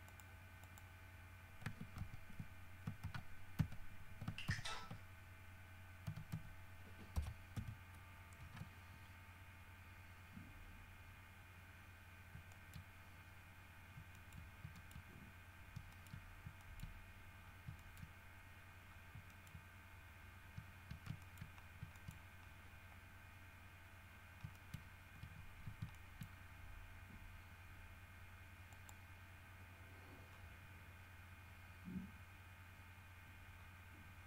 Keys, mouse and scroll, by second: 0.2 middle click, 0.8 middle click, 2.2 ctrl+z, 3.2 ctrl+z, 4.6 ctrl+z, 6.2 s, 6.5 x, 7.3 KP_Subtract, 7.7 KP_1, 8.6 KP_Enter, 11.2 scroll up 2, 12.7 shift+middle click, 13.0-13.7 shift+scroll up 2, 14.3 shift+middle click, 14.9 shift+middle click, 15.4-15.9 shift+scroll up 2, 16.1 shift+middle click, 16.4 shift+scroll down 1, 16.8 shift+middle click, 17.2 shift+scroll up 1, 17.6 scroll down 1, 18.0 shift+middle click, 18.8 scroll up 2, 19.2 scroll down 3, 19.4 shift+middle click, 20.5 scroll up 2, 21.4 shift+middle click, 21.9-22.9 shift+scroll up 3, 22.1 shift+middle click, 24.3 scroll up 2, 24.7 shift+middle click, 24.9 shift+scroll up 2, 26.1 shift+middle click, 28.9 middle click, 30.4-30.8 scroll up 2, 33.7-34.0 scroll down 2.